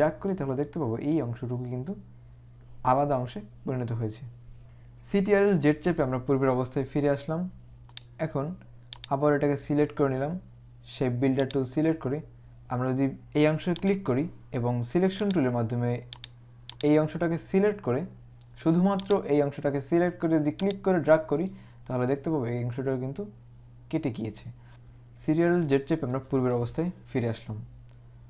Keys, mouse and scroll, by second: 5.7 z, 8.0 click, 11.6 click, 13.9 click, 15.4 click, 19.2 click, 20.7 click, 26.3 ctrl+z.